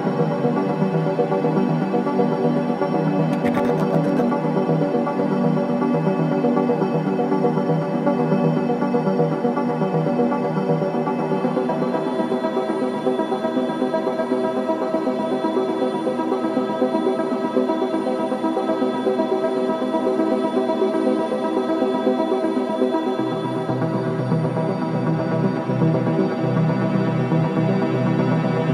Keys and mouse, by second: 1.0 click, 1.3-2.2 drag, 5.4 click, 6.3-7.4 typing, 9.1 Escape, 9.6-10.9 typing, 12.3 Escape, 13.1 r, 14.2 typing, 15.6-19.2 typing, 18.7-21.8 drag, 21.9 i, 22.4 click, 28.2 click.